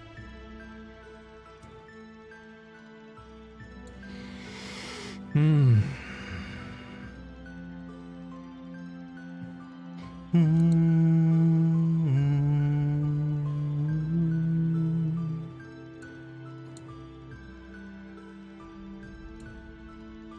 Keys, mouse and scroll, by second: 1.6-3.9 drag, 10.6 click, 15.9 click, 16.7 click, 18.7 click, 20.0 click.